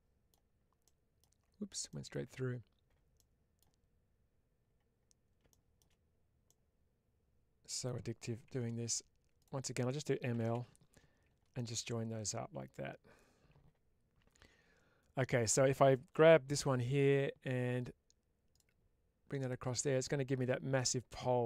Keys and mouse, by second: 0.7 middle click, 3.0 middle click, 6.3-7.7 middle drag, 8.4 1, 11.4-15.2 middle drag.